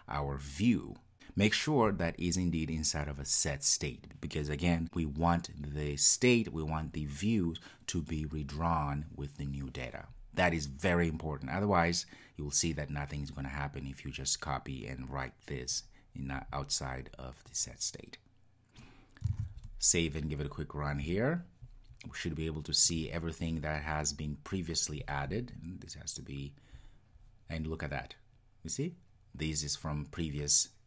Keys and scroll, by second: 19.4 super+s, 20.4 super+s, 21.0 ctrl+r.